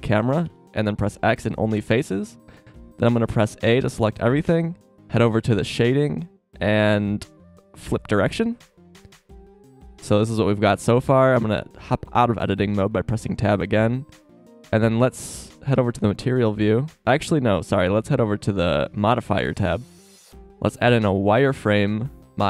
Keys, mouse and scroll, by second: 0.4 x, 3.6 a, 9.4 KP_0, 11.2 Tab.